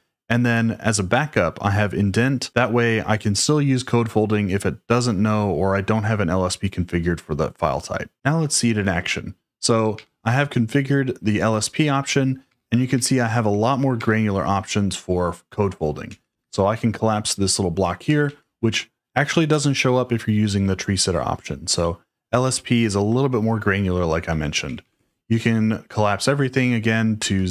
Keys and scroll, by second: 9.9 j, 12.5-13.9 typing, 15.4-16.6 typing, 18.0 typing, 24.4-25.1 typing, 26.9-27.5 typing.